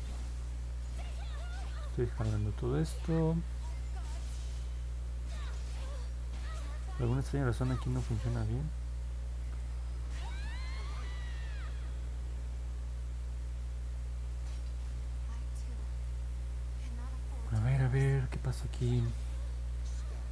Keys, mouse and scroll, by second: 0.2 click, 0.4 click, 0.7 click, 1.0 click, 1.3 click, 1.6 click, 1.8 click, 2.1 click, 2.4 click, 2.6 click, 2.9 click, 3.2 click, 3.4 click, 4.2 click, 4.5 click, 4.8 click, 5.1 click, 5.4 click, 6.4-9.3 drag, 12.7 click, 12.9 click, 13.3 click, 13.6 click, 13.8 click, 14.1 click, 14.4 click, 14.6 click, 14.9 click.